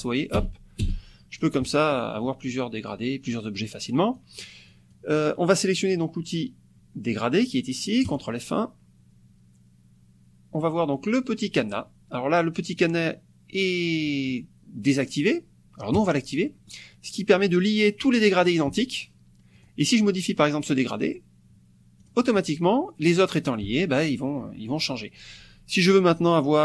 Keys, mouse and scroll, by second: 1.7 click, 2.3 click, 3.4-3.8 scroll up 2, 4.2 click, 4.7 click, 8.1 click, 14.2-14.6 scroll up 2, 16.0 click, 16.4 click, 19.5 click, 22.0 click.